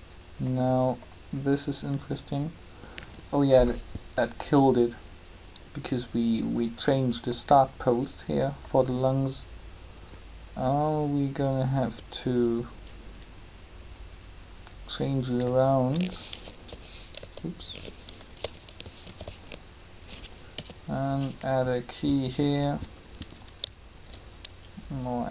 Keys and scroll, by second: 16.3 alt+e, 17.2 Tab, 19.0 alt+r, 20.5 i.